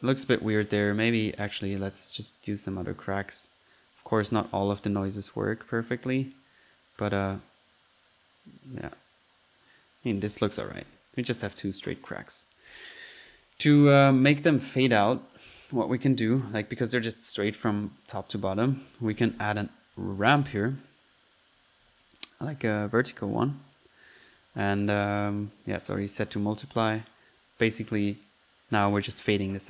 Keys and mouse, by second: 0.3 click, 1.1 click, 2.2-10.2 drag, 10.6 middle click, 10.9-11.2 drag, 11.4 drag, 12.0 click, 13.5 drag, 14.1-15.0 drag, 15.6-16.1 drag, 16.2-16.5 right drag, 16.6 click, 18.5 click, 18.8 click, 18.9-19.7 typing, 20.0 drag, 20.5 click, 21.6 middle click, 21.9 click, 22.4 drag, 22.8 drag, 23.5 click, 24.0 click, 24.8 click, 25.9-26.2 drag.